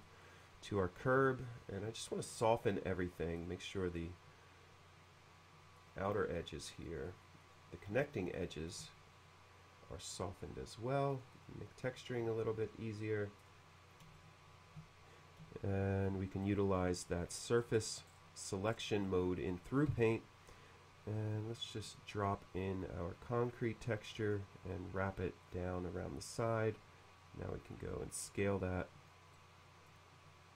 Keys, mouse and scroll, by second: 0.1 click, 0.3 click, 2.7 click, 3.4 click, 4.0-5.8 middle drag, 6.9 click, 7.1 click, 7.3 click, 7.5 click, 8.0 shift+middle click, 10.2-11.2 drag, 11.4-14.1 drag, 14.2-16.1 shift+middle drag, 16.4 shift+middle click, 17.6-19.0 scroll up 4, 19.1 middle click, 20.0 b, 22.0-24.4 drag, 25.5 click, 27.8-29.1 drag, 29.4 middle click.